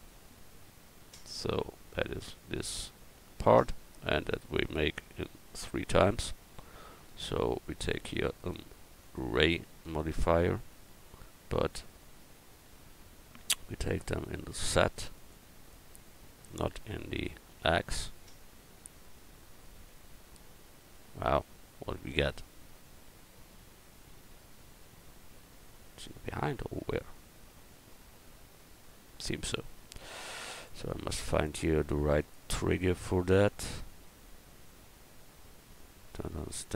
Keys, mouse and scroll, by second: 0.0 right click, 6.1 Tab, 9.6-10.9 drag, 13.8-15.7 drag, 16.4-18.3 drag, 20.1 KP_0, 20.9 KP_1, 28.2 KP_1, 35.5 middle click, 36.5-36.7 drag.